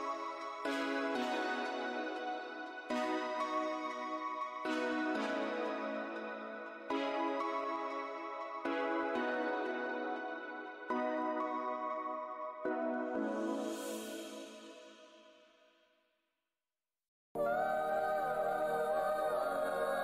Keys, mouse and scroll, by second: 1.2 alt+w, 1.9-2.6 scroll down 2, 5.2 alt+scroll down 1, 5.2 shift+d, 8.1 alt+click, 10.8 click, 12.2 click, 13.1 e, 14.4 click, 17.6 scroll down 1, 18.2-18.7 scroll down 1, 18.2 z, 19.1 alt+click, 19.2 alt+scroll down 1, 19.9 click.